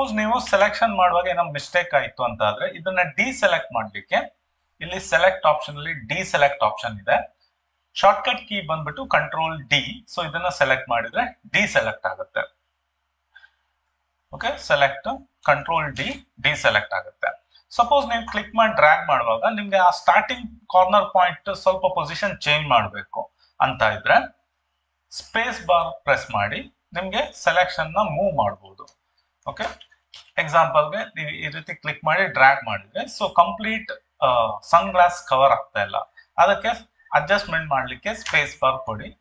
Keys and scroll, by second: 25.5 space, 38.2 space.